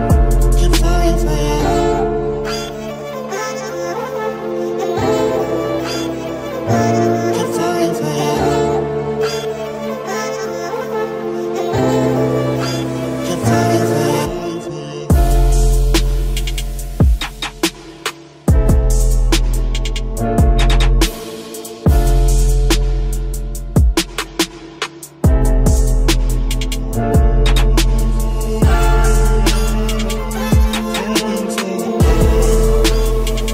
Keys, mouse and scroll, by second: 0.1 ctrl+r, 2.2 ctrl+r, 3.8 middle click, 4.8 ctrl+r, 6.6 ctrl+r, 9.4 ctrl+r, 11.4 ctrl+r, 13.2 ctrl+Tab, 14.0 c, 21.6-22.6 drag, 22.6 right click, 23.1-28.9 middle drag, 27.4 c, 30.6-32.3 right drag, 32.6 c.